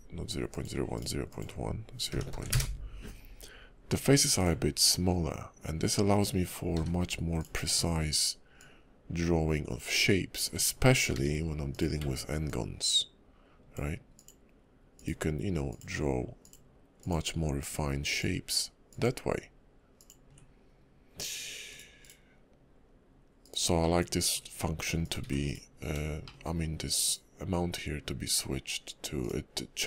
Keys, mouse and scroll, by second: 0.5 click, 4.3 click, 6.7 d, 8.6 ctrl+click, 11.1 d, 12.5 ctrl+click, 23.8 middle click, 25.0 click, 25.2 x, 26.2 shift+middle click, 27.0 click, 29.2 click.